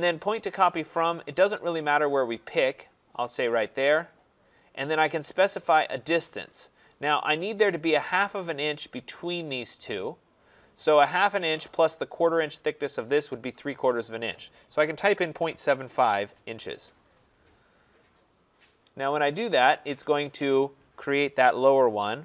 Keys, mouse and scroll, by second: 3.8 click, 14.7-16.8 typing.